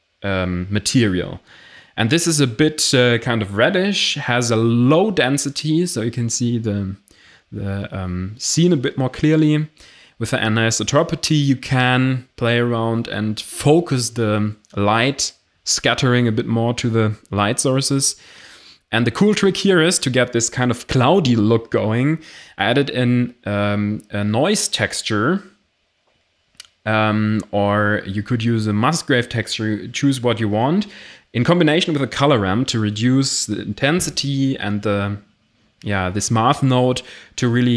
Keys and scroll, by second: 6.9 ctrl+z, 27.5 m.